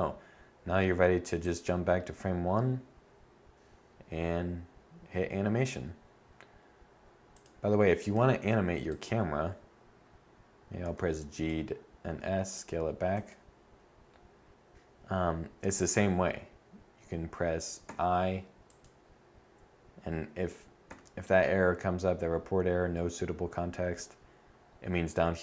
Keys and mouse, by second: 8.3-10.2 right drag, 10.2 g, 17.2 i, 20.2 i.